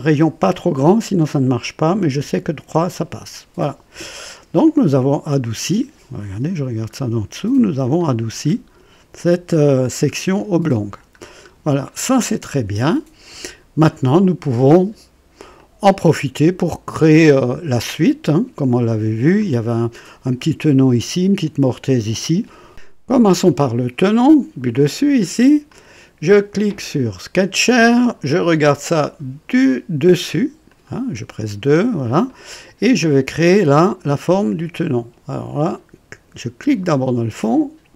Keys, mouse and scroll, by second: 1.9 KP_3, 2.6 KP_Enter, 4.6-6.1 drag, 6.4 KP_5, 6.9-7.2 scroll up 1, 7.4 right click, 8.3 scroll up 2, 9.7-10.1 scroll down 1, 10.4 click, 11.3 scroll down 1, 11.8-13.4 drag, 14.1 right click, 15.6-17.5 drag, 19.4 click, 25.6 click, 27.3 click, 30.6 click, 31.6 scroll up 2, 32.2 right click, 36.6 click.